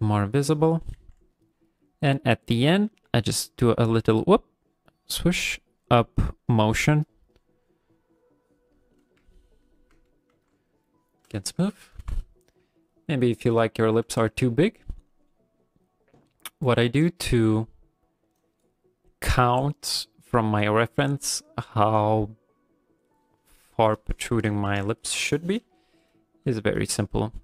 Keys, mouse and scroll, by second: 0.0 click, 1.0 f, 1.3 click, 2.0 click, 2.5 click, 2.9 f, 3.3 click, 3.8 click, 5.0 click, 5.2 click, 5.5 click, 5.7 click, 6.0 click, 6.3 click, 6.5 click, 6.8 click, 7.1 click, 7.3 click, 7.6 click, 7.8 click, 8.8 click, 9.3 ctrl+middle click, 9.6 ctrl+middle click, 10.1 middle click, 10.3 f, 10.8-11.3 shift+click, 11.2 click, 12.0 KP_1, 13.1 ctrl+middle click, 13.8 shift+middle click.